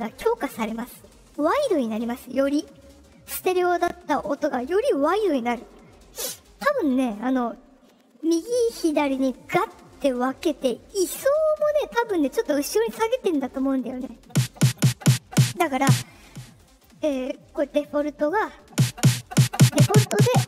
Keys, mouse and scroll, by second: 16.5-18.2 drag.